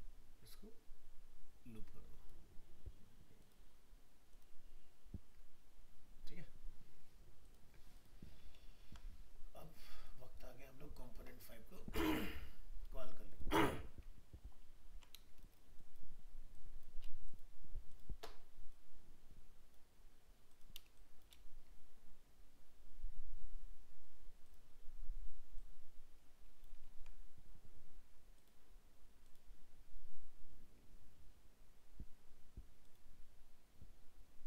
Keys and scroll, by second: 8.8 ctrl+-, 14.6 ctrl+-, 26.9 ctrl+z.